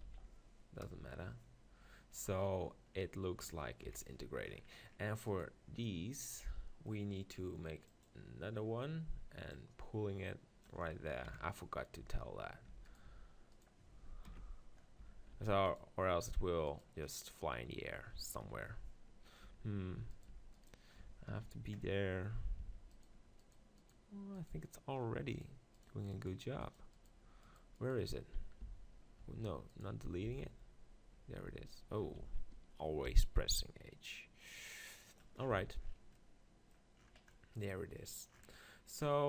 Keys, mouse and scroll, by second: 0.1 z, 0.8 KP_0, 2.9-5.3 middle drag, 3.8 KP_7, 5.3 click, 5.9-8.0 middle drag, 8.0-11.3 drag, 11.2 KP_7, 12.0 Tab, 12.7 Tab, 13.0-15.3 right drag, 15.0 Tab, 15.3 middle click, 15.3 z, 15.6-17.0 right drag, 17.0-18.5 drag, 18.5 middle click, 19.4 Tab, 20.0 Tab, 20.1-22.4 drag, 20.3 Tab, 22.4 middle click, 22.6 Tab, 22.9 click, 27.4-31.5 right drag, 28.6 x, 29.2 z, 30.3 z, 31.5 h, 32.3 ctrl+z, 33.1 g, 35.2-37.0 drag, 35.5 z, 36.3 right click, 37.0 middle click.